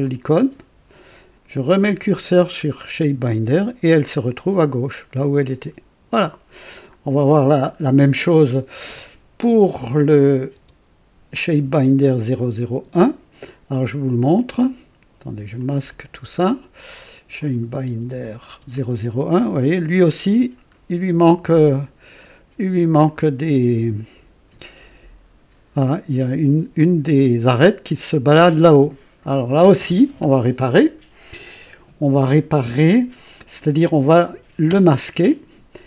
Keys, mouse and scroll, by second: 0.0 click, 7.0 scroll down 2, 7.6 scroll up 2, 8.1 scroll down 2, 9.9 click, 10.5 space, 12.3 click, 12.8 space, 14.3 click, 14.6-15.8 typing, 15.6 click, 16.4-16.7 scroll down 1, 17.4 click, 17.9 space, 17.9 space, 18.2 click, 18.5 space, 19.2 scroll down 1, 19.9 scroll up 1, 20.6 scroll down 1, 21.0 scroll up 1, 21.4 click, 22.0 right click, 23.0 click, 26.7 click, 34.7 space.